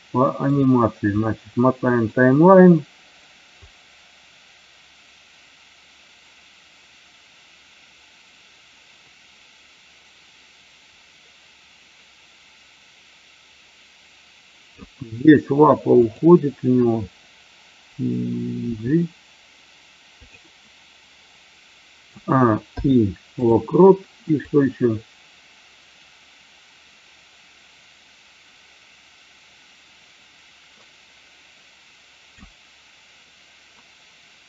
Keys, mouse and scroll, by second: 1.3 middle click, 3.7-14.9 drag, 18.8 g, 22.0 a, 22.7 i, 24.4-32.4 drag.